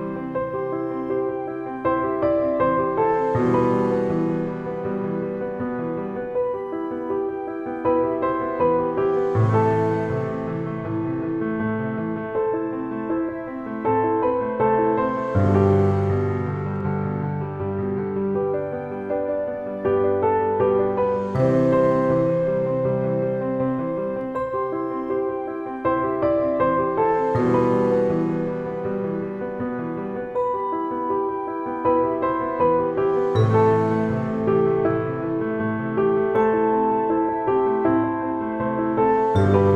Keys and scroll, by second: 0.0-1.5 typing, 3.1 e, 3.8 e, 5.5 shift+e, 6.0 e, 7.2 shift+e, 8.1 shift+w, 10.0 a, 12.3-15.4 typing, 17.2 e, 18.0 e, 18.8 e, 20.2 e, 21.1 e, 22.4 shift+f, 22.5 a, 23.9 shift+e, 24.4 e, 25.2 e, 25.9 e, 27.4 e, 29.2 e, 31.2-33.6 typing, 35.8 e, 36.6 e, 38.5 e, 39.5 e.